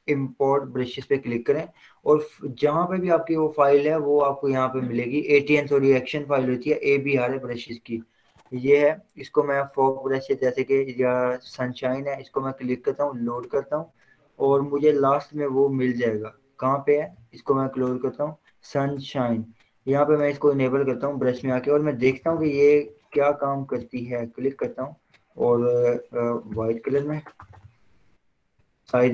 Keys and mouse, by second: 4.3 click, 9.9-18.2 drag, 21.6 b, 22.2 ], 22.9 ], 24.1 click, 25.3 ctrl+z, 26.7-29.1 typing.